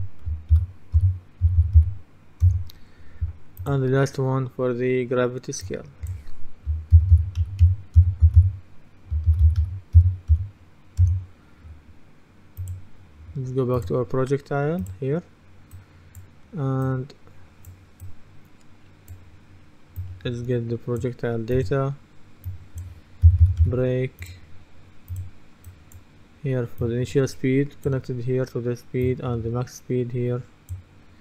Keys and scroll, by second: 0.0-2.3 typing, 2.5 Return, 6.7-10.9 typing, 11.1 Return, 23.1-24.2 typing.